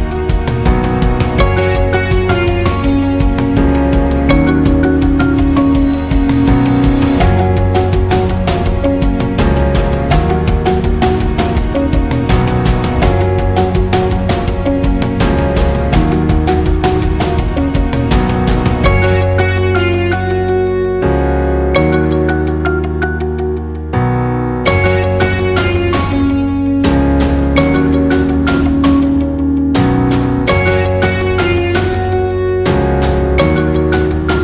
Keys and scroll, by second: 20.1 space, 26.2 Left.